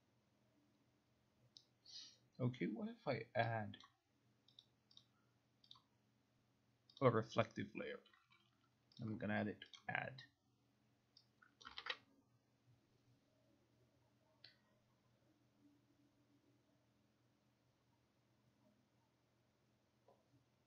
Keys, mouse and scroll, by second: 3.9 click, 4.7 click, 5.1 click, 5.8 click, 7.1 click, 9.0 click, 9.9 click, 11.7 click.